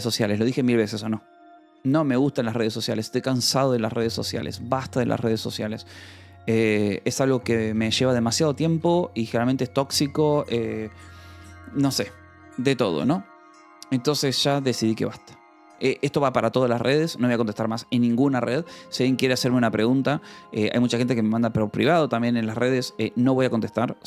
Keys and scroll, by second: 3.4-4.6 typing, 4.8 Right, 5.1 Return, 6.3-12.3 typing, 18.1 Return, 18.2 j, 18.9 k, 19.2 Return, 20.2 :, 20.9 Return, 22.3 =, 23.4 Return, 23.4 k.